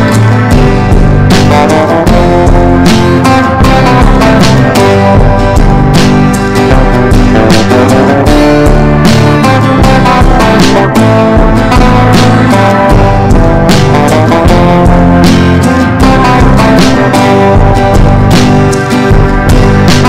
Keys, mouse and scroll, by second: 7.4 right click, 8.1-11.0 drag, 11.3 ctrl+g, 12.0 click, 13.4 click, 14.5 Down, 14.8 Down, 16.4 click, 17.2 ctrl+shift+g, 18.6 click, 19.6 ctrl+shift+g.